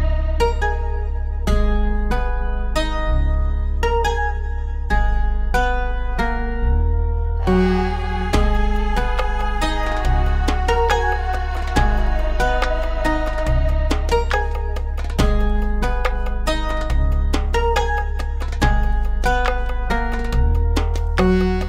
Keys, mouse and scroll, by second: 3.0 click, 3.9 click, 7.6 click, 8.3 F4, 9.7 F9, 11.4 click, 12.6 ctrl+o, 14.5-15.1 scroll down 1, 15.6 click, 16.7 click, 21.1 F4.